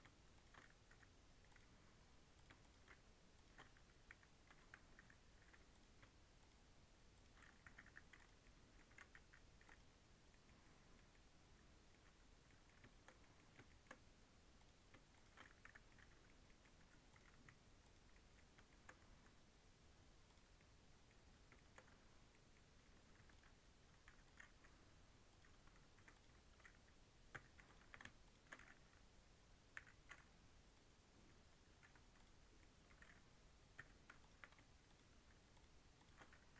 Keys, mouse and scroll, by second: 0.3 shift+click, 0.8 j, 1.4 click, 2.3 click, 2.5 shift+click, 3.3 shift+click, 4.0 j, 4.9 j, 5.6 click, 6.3 shift+click, 7.1 shift+click, 7.6 j, 7.8 j, 8.1 click, 8.3 middle click, 8.8 a, 9.1 m, 10.0 scroll down 1, 10.2 middle click, 11.0 scroll up 1, 11.0 middle click, 12.0-12.4 scroll down 3, 12.4-13.8 middle drag, 13.8 scroll up 1, 14.5 click, 15.1 shift+click, 15.5 j, 15.8 middle click, 16.7 2, 17.0 click, 17.2 x, 18.0 middle click, 18.3 scroll up 2, 18.6 shift+middle click, 19.0 1, 20.2 click, 20.5 middle click, 21.1 Tab, 21.5 shift+middle click, 21.8 Tab, 22.2 middle click, 23.1 3, 23.2 click, 24.0 2, 24.1 click, 24.4 x, 25.9 3, 26.0 click, 27.2 l, 28.1 shift+click, 29.7 m, 31.7 3, 32.1 click, 32.5-33.7 middle drag, 34.2 1, 34.8 shift+click, 35.4 shift+click, 35.9 shift+click, 36.3 m.